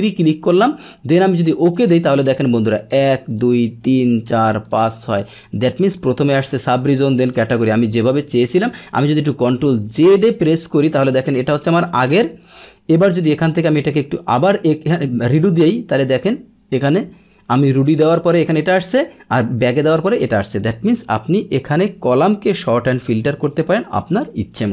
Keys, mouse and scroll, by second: 1.4 click, 2.0 click, 3.2 click, 3.8 click, 4.6 click, 5.9 click, 7.5 click, 10.9 ctrl+z, 11.5 click, 13.6 click, 14.6 click, 16.1-17.4 drag, 20.3 click, 21.3-23.4 drag.